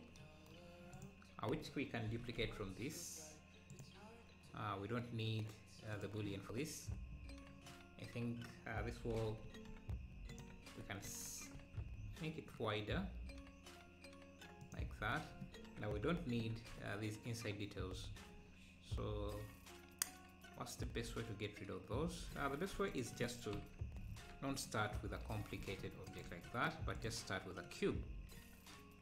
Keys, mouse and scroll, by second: 0.9-2.1 drag, 2.1 shift+d, 5.9 click, 7.2-7.6 scroll up 2, 7.7-8.1 scroll down 1, 8.5 scroll up 1, 9.2 g, 11.1 s, 14.1 s, 16.0 KP_Divide, 16.4 Tab, 22.7 x, 23.6 KP_Divide, 24.5 KP_1, 25.6 ctrl+s, 26.1 shift+right click, 26.3 shift+a.